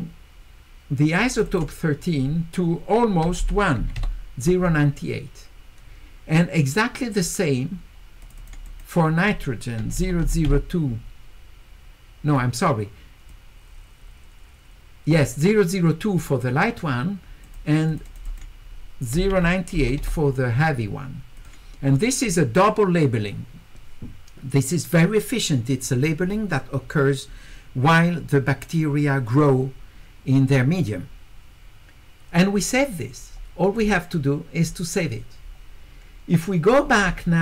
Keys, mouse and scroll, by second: 1.2 click, 1.3 click, 1.5 click, 8.2 click, 8.4 click, 8.7 click, 12.4 click, 17.4 click, 17.9 click, 18.1 click, 18.3 click, 21.4 click, 33.8 click.